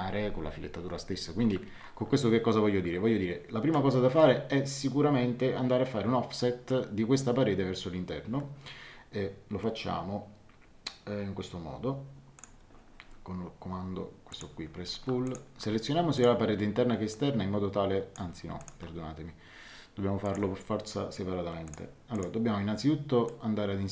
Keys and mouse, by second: 12.3 click, 14.3 click, 15.2 click, 18.6 click, 20.2 click, 22.1 click, 23.2 click.